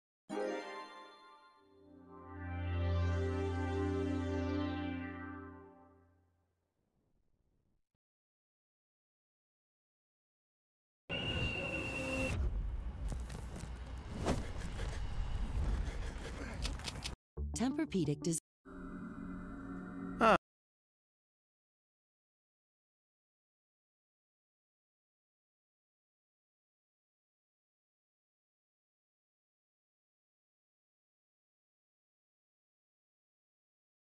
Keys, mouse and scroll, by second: 0.9 shift+middle click, 2.1 click, 3.6 g, 5.3 Tab, 5.6 click, 6.1 Tab, 6.6 click, 7.2 middle click, 8.5 shift+middle click, 9.0 middle click, 9.6-10.1 scroll up 2, 11.3 g, 12.5 scroll down 3, 12.7 scroll up 2, 12.8 scroll down 1.